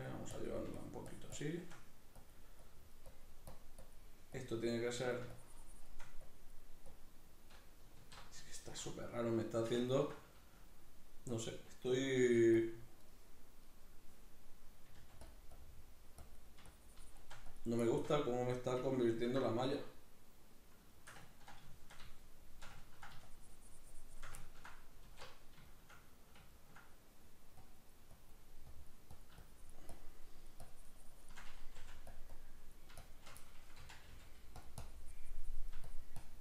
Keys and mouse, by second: 8.0 alt+q, 8.5-11.3 shift+middle drag, 11.3-12.7 drag, 12.2 f, 13.1-15.3 middle drag, 15.0 f, 15.3 click, 16.7-17.8 shift+drag, 17.8-23.3 shift+middle drag, 23.3-24.4 shift+drag, 24.4 ctrl+middle click, 25.0 alt+q, 25.7-27.6 shift+middle drag, 27.6-31.8 drag, 31.8 f, 32.2-33.8 drag, 33.8 c, 34.7-36.4 drag.